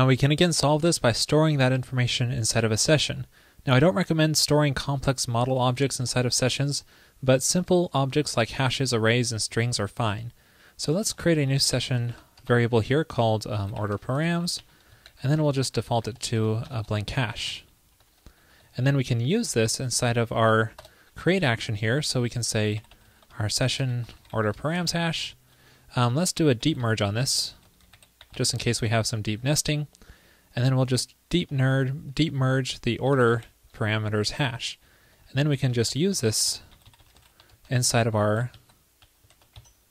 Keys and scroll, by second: 15.1 super+Right, 32.4 ctrl+p, 34.1 super+Right, 35.8 alt+shift+Left, 35.9 alt+shift+Left, 36.0 alt+shift+Left.